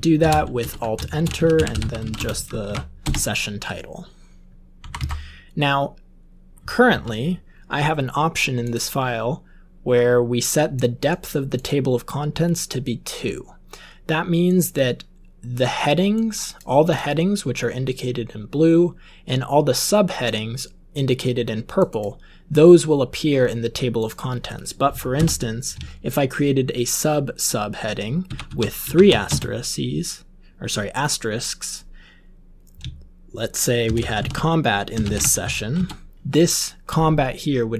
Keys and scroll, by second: 0.0-3.1 typing, 0.5 alt+Return, 4.8 Up, 4.9 Up, 6.5 Up, 6.8 Up, 25.1 Return, 28.2-30.2 typing, 33.6-35.5 typing.